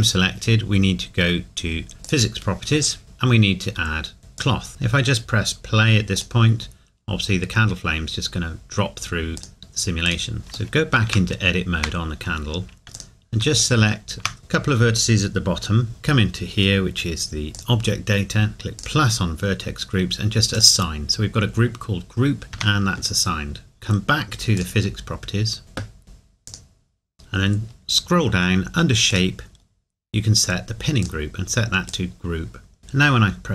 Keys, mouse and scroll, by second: 2.0 click, 4.4 click, 6.2 click, 9.4 click, 10.4 scroll up 1, 10.7 shift+middle click, 11.4 scroll up 1, 13.0 click, 17.5 click, 23.3 Tab, 25.6-26.0 scroll down 1, 26.4 click, 27.1-28.1 scroll down 1, 29.6-30.0 scroll down 1, 33.1 click.